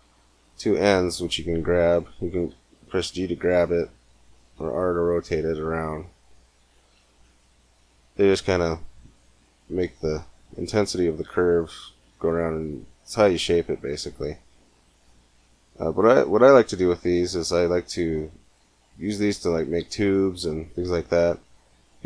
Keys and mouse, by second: 2.1 g, 4.4 r, 6.7 g, 18.7-20.6 drag.